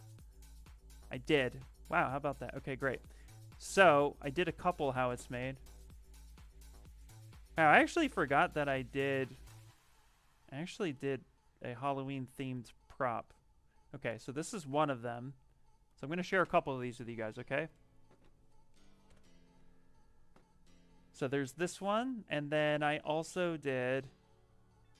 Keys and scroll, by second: 18.7 ctrl+v.